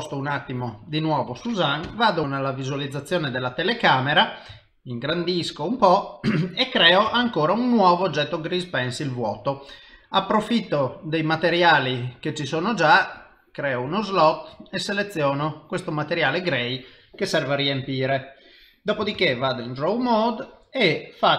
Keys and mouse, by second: 1.8 KP_0, 4.6 ctrl+middle click, 7.1 shift+a, 11.9 click, 13.2 click, 13.9 click, 19.2 ctrl+Tab.